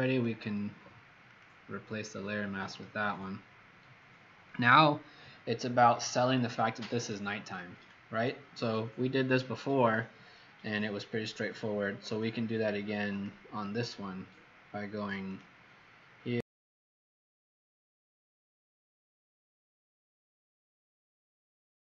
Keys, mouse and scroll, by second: 1.2 click, 11.2-12.2 scroll up 19, 13.0 click.